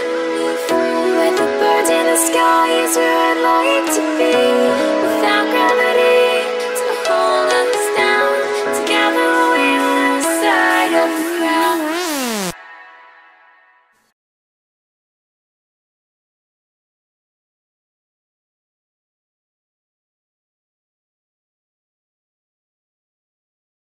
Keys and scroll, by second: 2.9 ctrl+t, 4.2 ctrl+t.